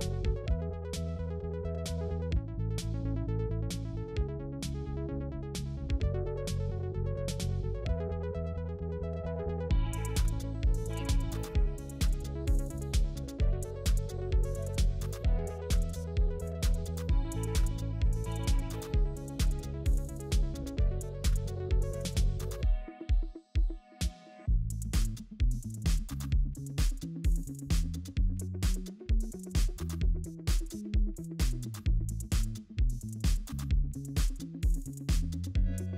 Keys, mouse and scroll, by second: 12.5 alt+click, 13.7 alt+click, 16.0 scroll down 1, 16.8-17.2 scroll up 1, 20.7-21.1 typing, 33.6 scroll down 1, 34.2-34.6 scroll up 1.